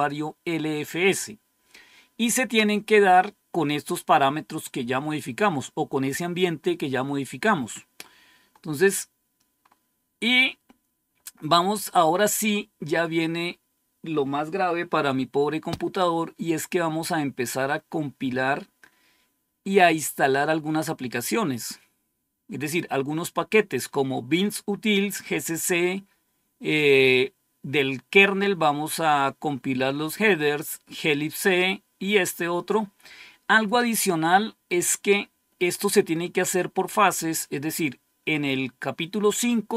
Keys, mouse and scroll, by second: 7.2 click, 8.8-9.6 scroll down 1, 9.6 scroll up 1, 10.3-11.5 scroll up 1, 34.0-34.3 scroll down 1, 35.1-35.8 scroll up 1.